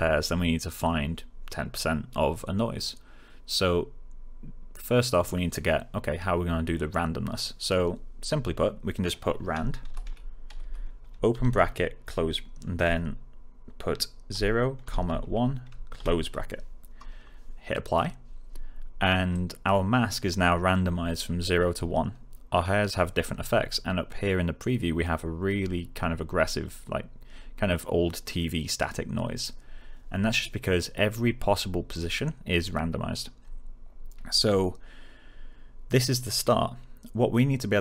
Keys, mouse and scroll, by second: 9.6-11.3 typing, 14.3 0, 17.8 click.